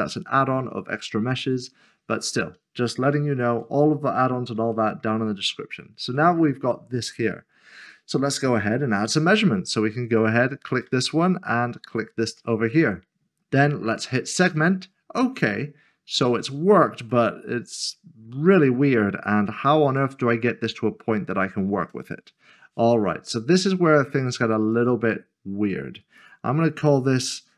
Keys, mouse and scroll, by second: 0.2 scroll down 1, 1.6-2.0 scroll up 1, 3.8-4.6 scroll down 1, 4.7 shift+middle click, 6.5-7.6 scroll up 1, 10.0-10.8 scroll up 1, 14.5 click, 17.1 click, 19.1 scroll up 1, 21.5 middle click, 24.7 click.